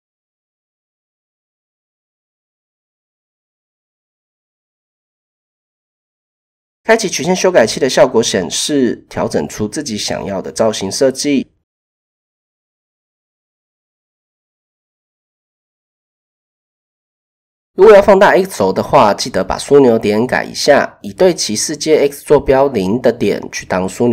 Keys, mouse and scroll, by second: 1.6 click, 3.3 Tab, 4.0 shift+click, 5.1 click, 7.7 shift+middle click, 8.5 click, 9.2 a, 10.2 s, 13.7 shift+middle click, 15.7 shift+click, 16.7 shift+click, 18.2 click, 20.1 shift+click, 21.0 s, 23.2 typing.